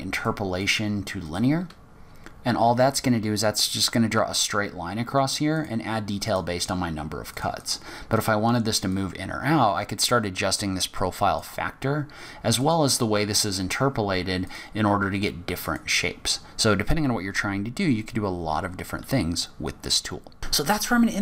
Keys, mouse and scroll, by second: 0.6 click, 5.5 click, 6.2 click, 7.4 click, 7.6 click, 9.1 click, 12.6 click, 14.4 click.